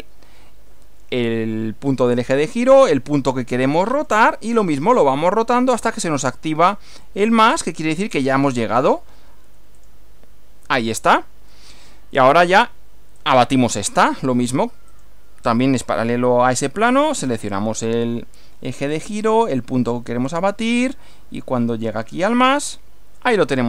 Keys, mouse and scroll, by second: 3.9 click, 9.8 click, 11.6-12.6 middle drag, 13.2 click, 14.9 click, 17.1 click, 18.9 click, 22.6 click.